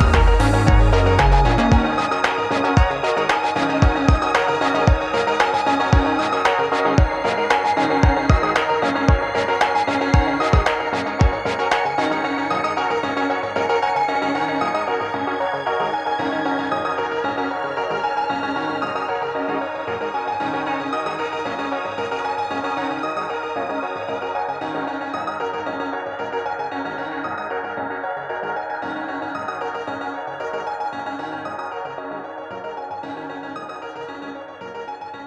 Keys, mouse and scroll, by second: 3.5-4.4 drag, 5.1-6.0 alt+scroll down 2, 6.0 alt+scroll down 1, 6.3 space, 6.3 click, 6.6 space, 6.9-13.7 drag, 13.7-15.8 drag, 15.8-18.6 drag, 19.0 click, 23.4 click, 27.7 Tab, 28.7 click, 29.6 Tab, 31.8-35.2 drag.